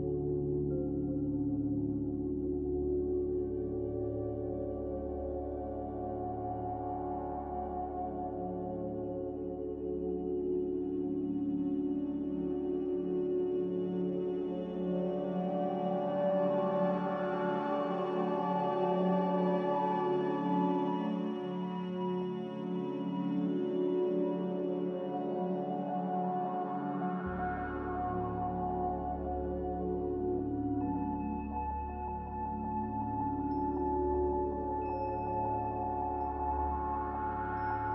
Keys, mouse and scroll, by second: 6.2 F9, 6.5 s, 7.9-8.7 typing, 9.3 Tab, 9.9-11.4 typing, 14.9 z, 15.6 n, 18.8 Escape, 18.9 Escape, 19.0 Escape, 20.3 x, 22.2 z, 25.9-26.7 typing, 28.9 x, 32.3 n.